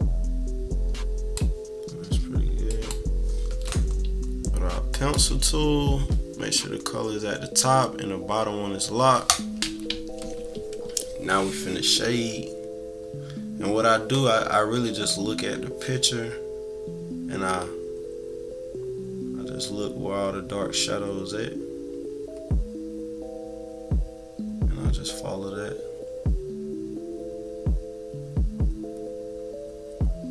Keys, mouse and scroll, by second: 0.5-1.5 drag, 2.7 click, 4.9 click, 15.4-30.3 drag.